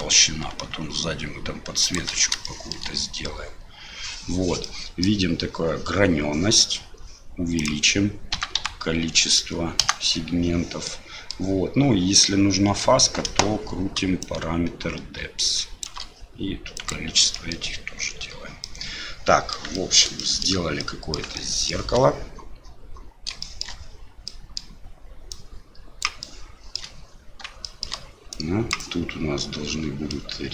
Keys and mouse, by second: 2.5 shift+middle drag, 4.7-5.1 middle drag, 7.6-10.4 drag, 11.0 middle click, 14.3-15.9 shift+drag, 17.4 middle click, 18.6-19.6 middle drag, 19.8 shift+middle drag, 20.3 middle click, 20.9 middle click, 21.4-21.7 shift+middle drag, 23.5 shift+middle drag, 24.2 middle click, 25.4 click, 26.3 shift+middle click, 27.7 shift+middle click, 28.3 click, 30.2-30.5 middle drag.